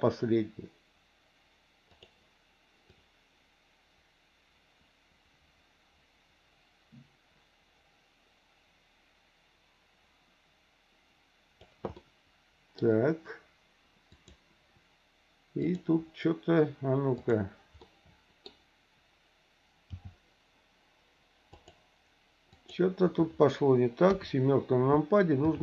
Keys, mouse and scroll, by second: 3.0-11.7 drag, 11.9 middle click, 14.1 click, 15.6 click, 17.2 click, 17.8 middle click, 19.9 g, 22.5 click, 24.1 KP_7, 25.4 r.